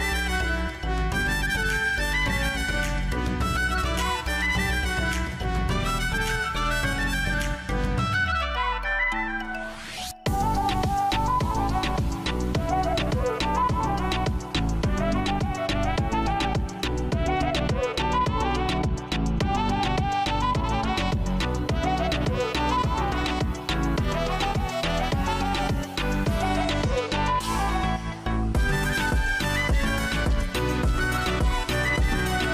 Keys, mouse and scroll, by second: 9.1 scroll, 9.6 scroll down 6, 14.8 scroll down 5, 16.6 scroll up 9, 16.9-17.3 scroll, 17.3 scroll down 4, 17.9 scroll down 1, 18.8 click, 22.0-23.0 drag.